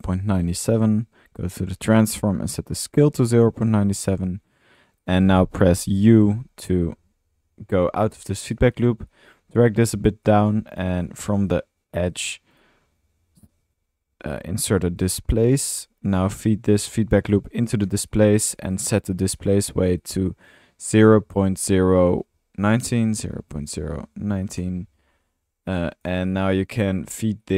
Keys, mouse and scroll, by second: 0.9 click, 1.3 typing, 2.2-4.3 middle drag, 4.7 click, 5.0 typing, 6.8 u, 10.8 typing, 12.6 Tab, 13.2-14.3 typing, 15.1 drag, 15.4 click, 15.8 click, 17.8 drag, 18.9-19.7 middle drag, 20.0-20.3 drag, 25.5 middle click, 25.7 click, 26.1-26.4 middle drag, 26.4-26.9 drag, 27.4-27.5 drag.